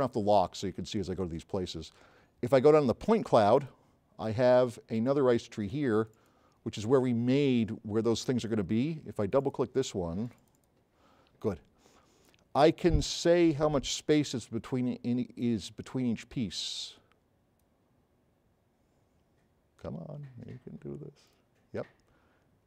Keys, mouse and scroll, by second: 0.1 click, 0.2 click.